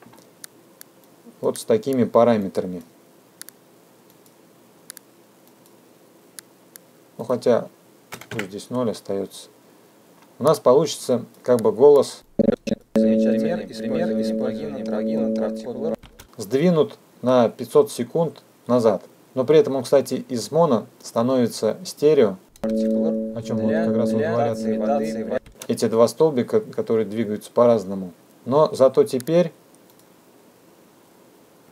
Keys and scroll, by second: 9.5 KP_0, 9.7 KP_Enter, 14.3 space, 24.6 space.